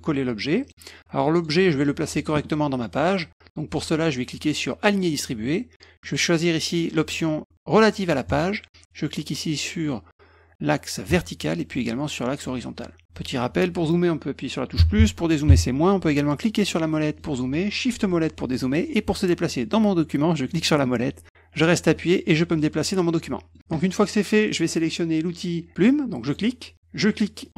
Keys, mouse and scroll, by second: 0.6 click, 1.3 click, 4.8 click, 6.0 click, 8.2 click, 11.0 click, 12.3 click, 16.7 middle click, 17.1 middle click, 18.0 shift+middle click, 20.4-21.8 middle drag, 22.2 middle click, 22.5 middle click, 23.6-24.6 middle drag, 26.2 click, 27.4 click.